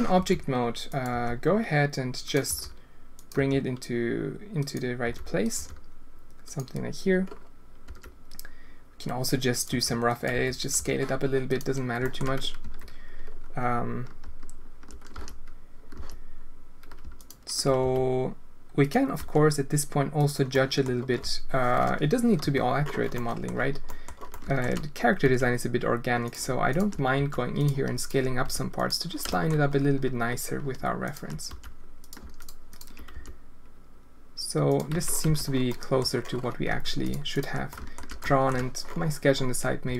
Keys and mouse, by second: 0.1 r, 1.1 g, 2.4 r, 3.3 g, 5.0 r, 5.5 g, 7.8 s, 9.6 g, 10.3 s, 10.7 g, 12.0 shift+drag, 12.6 Tab, 15.1 z, 15.9 z, 17.8 s, 19.1 s, 20.5 click, 22.4 KP_Decimal, 23.1 click, 23.8 click, 24.3 alt+shift+click, 25.2 s, 27.1 s, 28.0 click, 28.4 s, 29.2 shift+click, 31.4 s, 32.3 alt+click, 32.7 alt+click, 33.1 s, 34.9 Tab, 35.2 z, 35.7 click, 36.7 Tab, 37.0 alt+click, 37.3 alt+click, 37.7 alt+shift+click, 38.2 alt+shift+drag, 39.8 s.